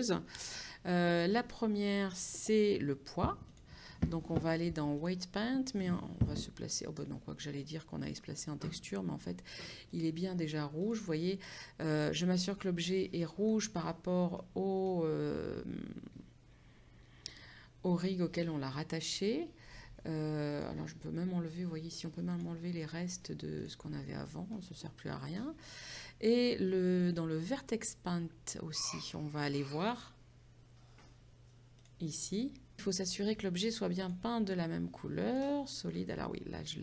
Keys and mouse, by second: 2.6 click, 5.0 click, 10.1 click, 12.6 middle click, 13.6 KP_5, 15.2 middle click, 20.6 click, 22.3 click, 24.6 middle click, 27.4 click, 29.1 click, 31.8 click, 34.1 click.